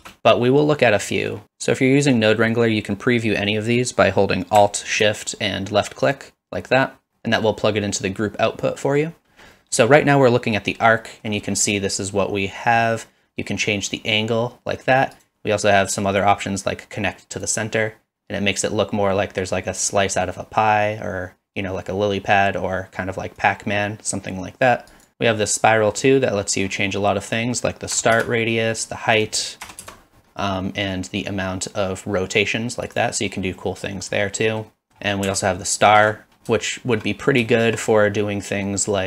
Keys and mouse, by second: 0.0 ctrl+space, 1.2 middle click, 6.1 alt+shift+click, 7.3 middle click, 8.8 middle click, 9.6 middle click, 10.4 middle click, 11.0 middle click, 13.7-15.2 drag, 17.4 click, 23.4-25.0 drag, 25.1 ctrl+z, 25.5 middle click, 27.3-28.5 drag, 29.2-30.2 drag, 31.8-33.0 drag, 33.6 middle click, 34.5 middle click, 34.9 middle click, 35.8 alt+shift+click, 36.6-37.0 shift+middle drag, 37.5 shift+middle click.